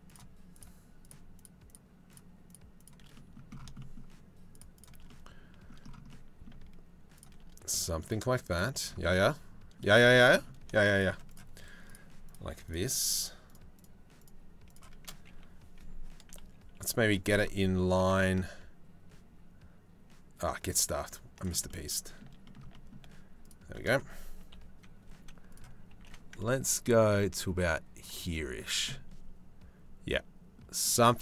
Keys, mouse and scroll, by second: 0.1 shift+click, 0.7 shift+click, 2.4 shift+middle click, 2.7 middle click, 5.0 middle click, 5.7 middle click, 7.3 middle click, 8.7 middle click, 9.6 shift+middle click, 11.5 shift+right click, 12.3 shift+right click, 12.7 shift+right click, 13.1 shift+right click, 13.8 shift+right click, 16.0 KP_3, 17.4 g, 21.3 middle click, 22.0-24.1 shift+middle drag, 24.1 KP_3, 24.7 z, 25.5 g, 27.9 z, 28.5-31.1 middle drag.